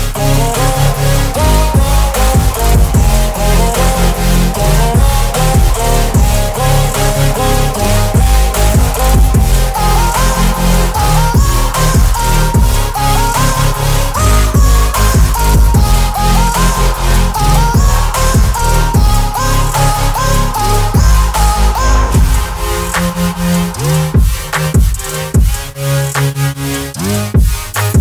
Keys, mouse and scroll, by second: 11.5-14.5 scroll up 1, 16.5-17.9 scroll down 1, 17.9 click, 18.4-19.3 scroll down 1, 23.4 click, 25.6 ctrl+a.